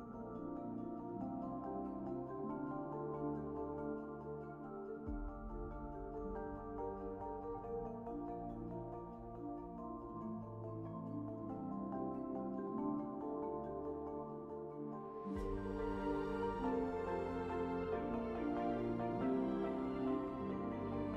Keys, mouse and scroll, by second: 0.2 `, 0.4 space, 0.5 1, 1.2 alt+s, 1.7 4, 1.8 q, 2.3 z, 2.7 b, 4.2 space, 4.4 F4, 4.6 4, 6.0 space, 6.2 `, 6.7 1, 7.6 space, 7.9 F4, 9.2 space, 9.8 4, 10.0 q, 10.7 alt+z, 11.0 ctrl+space, 11.6 space, 11.8 F4, 12.0 4, 12.3 space, 13.3 1, 13.7 alt+c, 16.0 alt+shift+w, 17.2 shift+w, 17.4 4, 17.8 z, 18.3 alt+x, 19.1 shift+h, 20.3-21.1 typing.